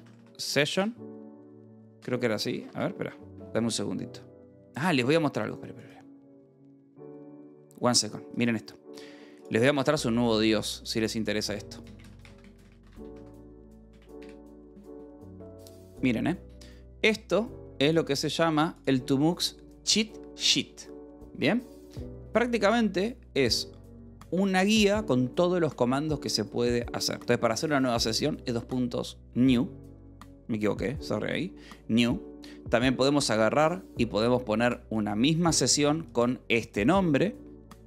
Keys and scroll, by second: 0.0-0.7 typing, 0.8 Return, 2.2-3.1 typing, 11.3-13.6 typing, 13.9 Down, 14.2 Return, 25.6 w, 32.9 (.